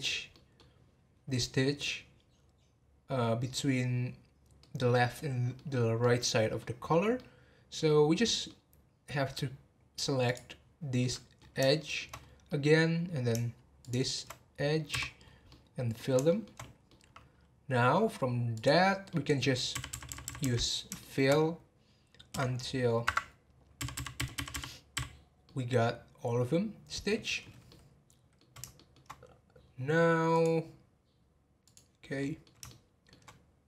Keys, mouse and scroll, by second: 2.7-4.4 scroll down 2, 4.6-6.8 middle drag, 6.8 scroll down 2, 7.1-8.7 middle drag, 8.7 scroll up 1, 10.2 click, 11.0-12.1 middle drag, 12.1 scroll up 2, 12.4-13.8 middle drag, 13.8 shift+click, 14.9 f, 15.2 scroll down 3, 15.4-18.5 middle drag, 18.5 click, 19.1 middle click, 19.7-20.4 f, 21.0-21.3 shift+middle drag, 21.3-22.3 scroll down 2, 22.3 g, 25.4-29.6 middle drag, 29.6-30.8 scroll up 3, 30.8-32.2 scroll up 1, 32.2-33.3 middle drag, 33.3 scroll up 1.